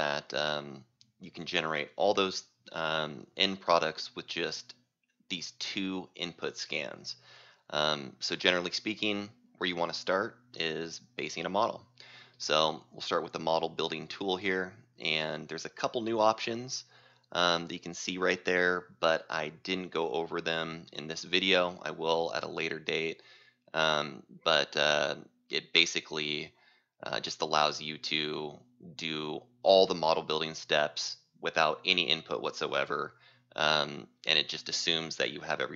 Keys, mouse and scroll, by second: 5.0-11.8 drag, 11.8 right click, 14.2 click, 25.9-28.9 drag.